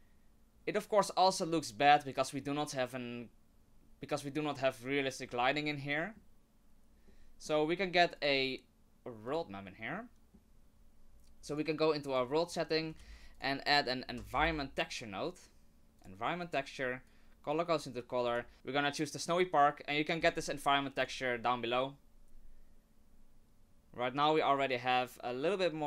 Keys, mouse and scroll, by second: 5.6 middle click, 7.1 middle click, 8.1 click, 9.9 middle click, 11.5 click, 12.6 middle click, 13.0 shift+a, 17.1 click, 18.2 click, 21.1 click.